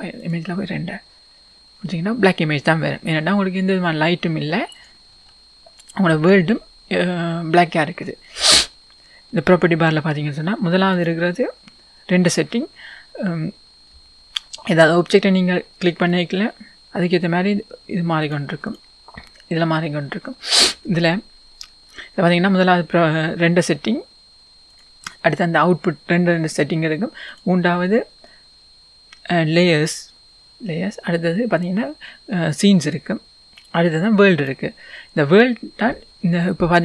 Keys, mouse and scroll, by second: 0.5-18.8 drag.